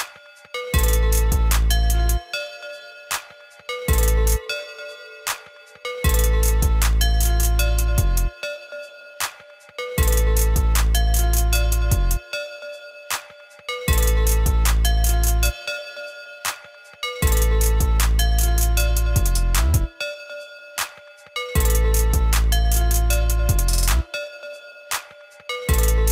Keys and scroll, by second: 23.7 ctrl+z, 24.2 ctrl+z.